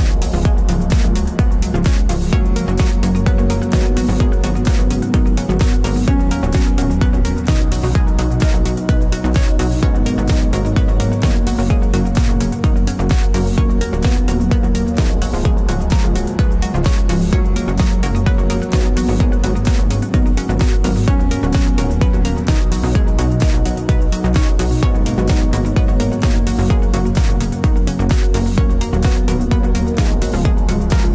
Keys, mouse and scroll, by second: 19.0 click.